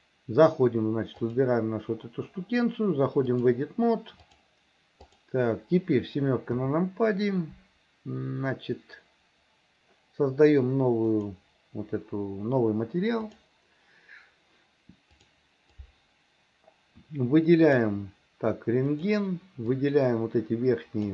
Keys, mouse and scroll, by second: 0.0 click, 1.2 click, 3.3-4.5 drag, 5.1 click, 6.6 KP_7, 11.2 click, 13.3 click, 15.2 click, 15.8-17.9 drag, 19.0 click, 19.8-21.1 drag.